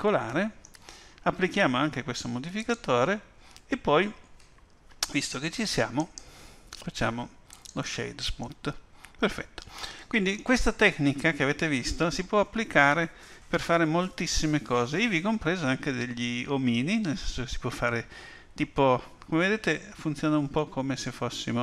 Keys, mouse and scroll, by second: 2.6 click, 5.9 right click, 8.4 middle click, 11.0-11.5 scroll up 2.